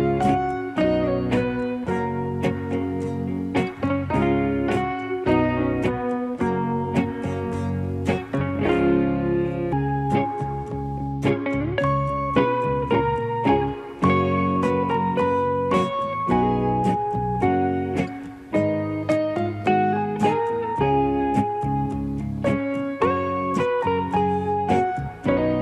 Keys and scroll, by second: 4.1 space, 15.5 ctrl+KP_0.